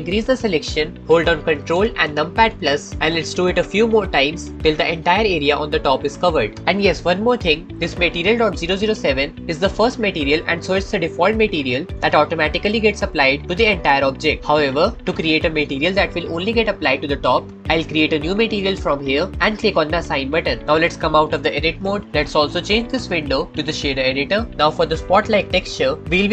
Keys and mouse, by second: 2.4 ctrl+KP_Add, 3.3 ctrl+KP_Add, 5.9 ctrl+KP_Add, 13.8 middle click, 18.5 click, 19.2 click, 20.6-21.6 drag, 21.6 Tab, 23.1-24.3 drag, 24.5-25.8 drag.